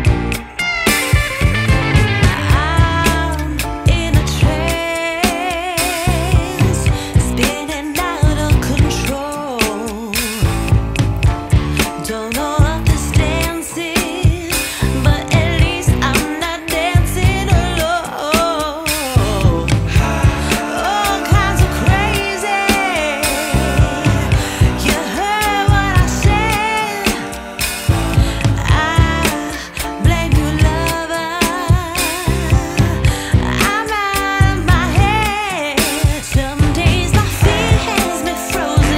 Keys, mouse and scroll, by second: 4.5 click, 6.5 right click, 11.0 click, 16.6 click, 18.6 click, 25.6 click, 28.4 right click, 34.7 click, 37.5 click.